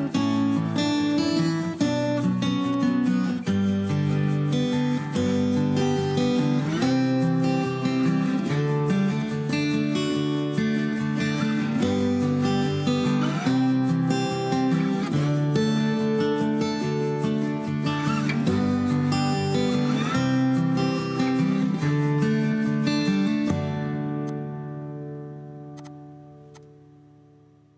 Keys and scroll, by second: 0.8 ctrl+a, 2.2 ctrl+h, 5.3 Escape, 23.8 Escape, 24.8 Delete, 27.2 Delete.